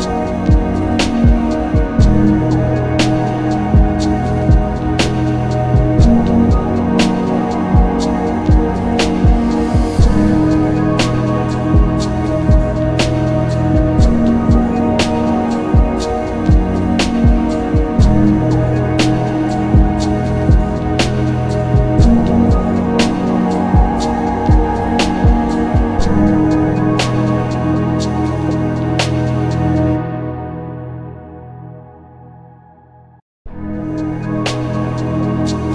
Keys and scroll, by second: 1.5 ctrl+z, 13.6 ctrl+z, 26.1 z, 30.8 ctrl+z.